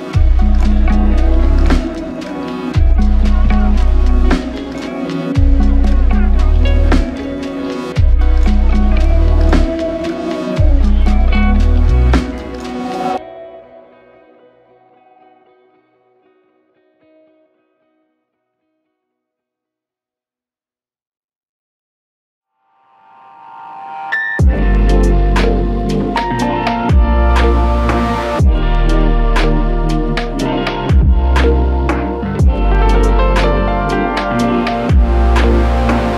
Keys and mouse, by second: 0.5 alt+click, 5.3 double click, 10.0 double click, 29.0 double click.